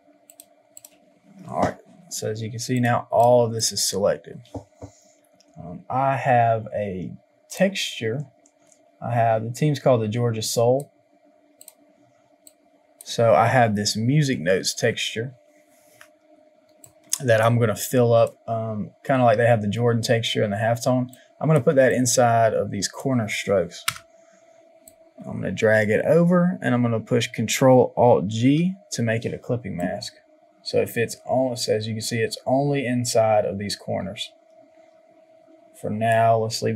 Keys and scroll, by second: 23.9 Return.